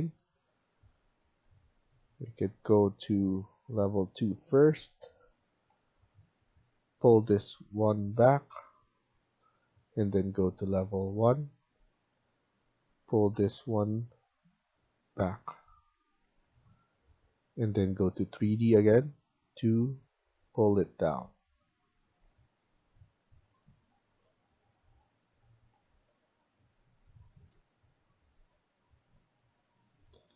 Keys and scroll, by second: 9.3 Escape, 15.8 Escape, 16.1 Escape, 21.6 Escape, 22.1 Escape, 27.5 Escape.